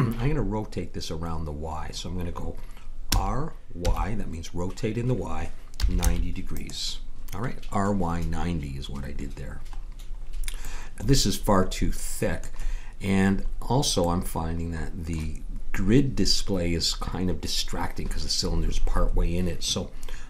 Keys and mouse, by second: 3.1 r, 10.7-20.2 middle drag.